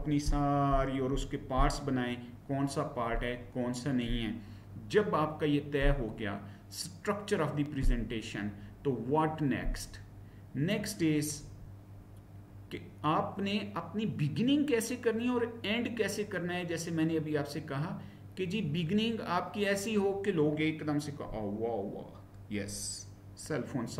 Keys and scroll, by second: 9.7 Right, 11.4 Down.